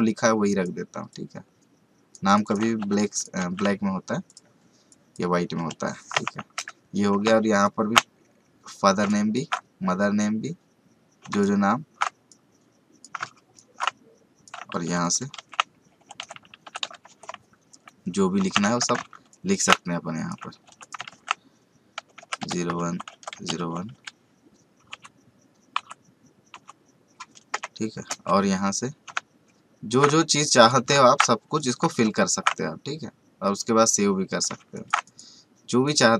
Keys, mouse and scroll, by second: 0.4 click, 2.8 t, 3.1 click, 3.4 ctrl+a, 4.2 click, 5.5 Return, 6.5 v, 7.6-9.3 ctrl+alt+shift+drag, 9.3-12.3 ctrl+alt+shift+drag, 12.3 click, 13.5 ctrl+alt+shift+click, 14.8 t, 15.0 click, 15.3 ctrl+a, 16.8 typing, 18.6 typing, 19.3 ctrl+alt+shift+click, 20.6 typing, 20.8 click, 21.1 ctrl+a, 28.1 v, 30.1 ctrl+click, 31.6 click, 32.3-36.1 ctrl+alt+shift+drag.